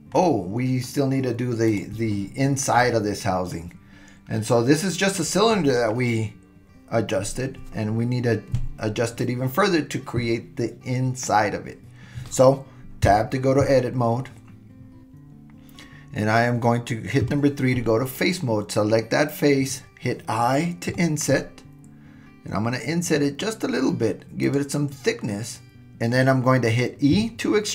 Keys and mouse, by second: 0.2-0.9 middle drag, 13.1 Tab, 17.2 3, 25.8 super+e, 27.2 e.